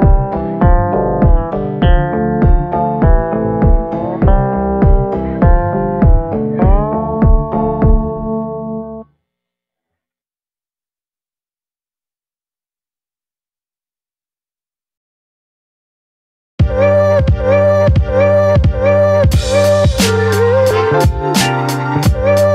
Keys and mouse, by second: 2.6 middle click, 3.8 middle click, 4.3 middle click, 5.4 KP_7, 6.2 KP_1, 6.9 middle click, 8.4 [, 8.7 [, 8.9 [, 9.0 click, 10.1-10.7 [, 10.9 click, 10.9 [, 12.7 ctrl+z, 13.1 click, 14.0 click, 15.1 ctrl+z, 15.5 click, 16.4 ctrl+z, 16.4 click, 17.2 click, 17.9 ctrl+z, 18.3 click, 18.9 ctrl+z, 19.1 click, 19.5 click, 20.7 ctrl+z, 21.0 click, 21.5 ctrl+z, 21.7 click, 22.2 click.